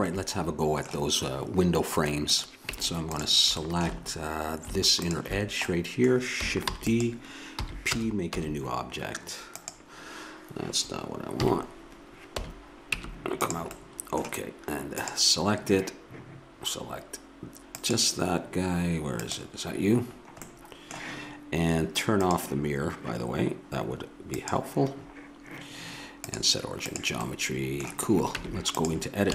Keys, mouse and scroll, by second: 2.4-3.7 drag, 2.7 Tab, 3.7 middle click, 5.1-6.8 middle drag, 6.8 shift+d, 7.7 p, 8.4 q, 11.5 KP_3, 13.0 Tab, 15.0-16.3 drag, 18.6-20.1 drag, 20.1-21.1 middle drag, 22.2-24.1 drag, 24.4-28.4 drag, 28.4 Tab.